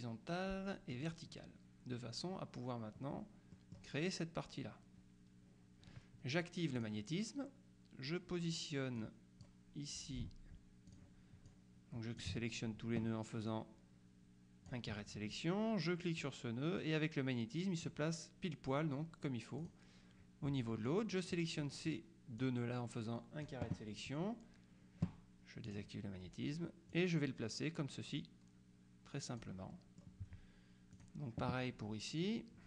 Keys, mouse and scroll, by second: 1.0 click, 3.6 middle click, 6.8 click, 9.1 click, 11.0 click, 13.6-15.2 drag, 16.3-18.4 drag, 19.7 click, 20.9 click, 22.5-24.0 drag, 25.8 click, 27.0-30.0 drag, 31.0 click.